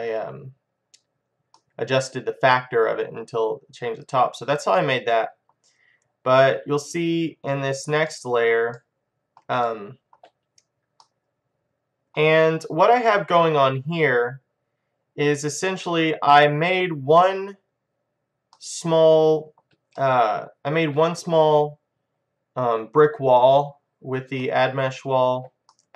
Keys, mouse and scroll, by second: 0.8 middle click, 1.7 right click, 1.9 middle click, 2.9-4.1 middle drag, 4.8-7.1 middle drag, 7.1-8.9 drag, 8.2-14.8 middle drag, 14.8 middle click, 16.3-16.8 scroll up 1, 16.8-17.6 scroll down 1, 17.6-18.3 scroll down 1, 18.3 scroll up 1, 18.6-21.8 middle drag, 22.4-24.0 scroll up 1, 24.0-24.4 scroll up 1, 24.4-25.9 middle drag.